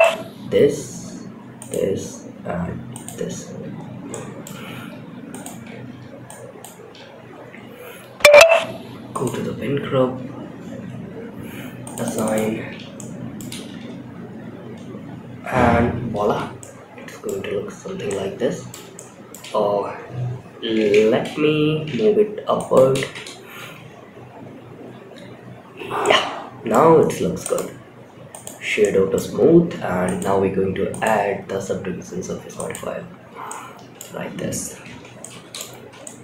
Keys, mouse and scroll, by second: 1.6 shift+click, 2.2 shift+click, 3.1-3.4 scroll up 3, 3.4 shift+middle click, 4.6 shift+click, 5.6 ctrl+click, 6.6-6.9 scroll down 4, 8.4 click, 10.2 scroll up 2, 11.1 click, 11.3 click, 11.6 click, 12.0 Tab, 12.2 scroll up 1, 12.3-12.7 middle drag, 13.0 space, 15.5 space, 15.8 scroll up 1, 15.9-16.6 middle drag, 16.7 scroll up 3, 17.4-18.0 shift+middle drag, 18.2-18.6 middle drag, 20.1 shift+Down, 20.1 shift+Left, 21.1 g, 22.2 space, 25.1 space, 25.3-26.2 middle drag, 26.2 scroll up 1, 26.7-28.1 right drag, 28.1-28.4 middle drag, 29.4 click, 30.2-32.3 drag, 32.8-33.3 middle drag, 34.2 shift+Left, 34.5-34.9 middle drag, 35.0 space, 35.4-35.9 middle drag.